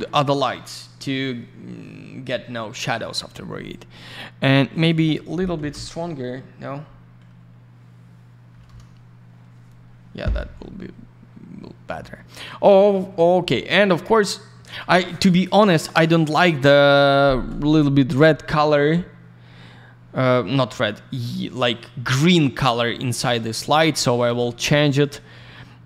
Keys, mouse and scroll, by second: 1.1-1.6 scroll up 1, 1.6-2.4 scroll down 1, 4.7 click, 4.8 click, 5.5 2, 5.7 Return, 8.5 5, 8.6 Return, 10.5-10.8 scroll down 1, 18.9 scroll down 1, 22.4 scroll down 1, 22.8 alt+middle click, 23.2 alt+r, 23.3 click, 23.5 click, 23.6 click, 23.7 double click, 24.2 alt+r, 24.3 click, 25.1 middle click.